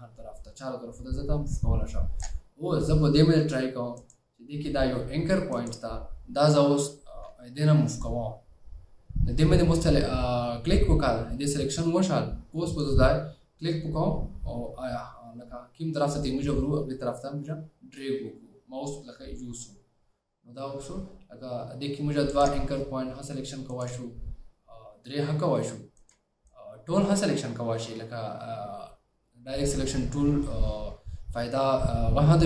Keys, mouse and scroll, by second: 24.0 shift+click, 26.1 shift+click.